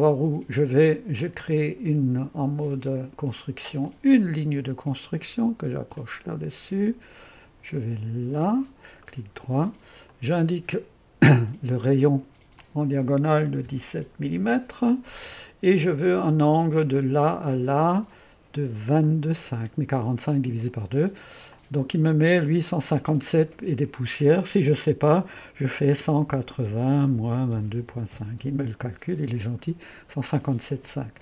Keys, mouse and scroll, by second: 1.3 click, 3.9 click, 6.0-9.1 drag, 9.1 middle click, 10.2-13.8 drag, 13.5-14.4 typing, 17.0-18.0 drag, 19.1-20.2 drag, 21.6-24.7 drag, 25.8-28.2 typing, 27.2 KP_Subtract, 28.4 Return.